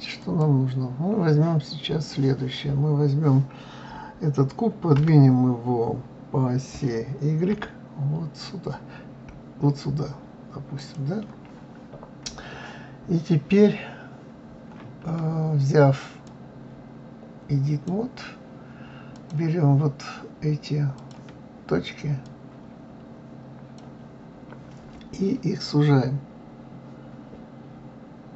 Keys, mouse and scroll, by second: 0.2 click, 4.9 g, 11.7-12.7 scroll up 1, 16.2-19.2 drag, 20.9 click, 22.2 click.